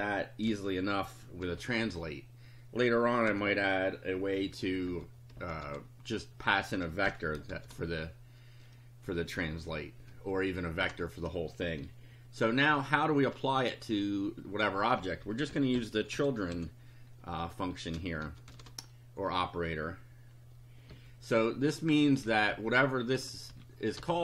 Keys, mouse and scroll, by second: 1.4 shift+8, 1.9 shift+i, 3.3 ,, 4.9-7.5 typing, 10.8 Return, 15.0-17.0 typing, 18.0-19.0 typing, 20.9 ;, 22.1 Up, 23.5 Home, 24.0 BackSpace.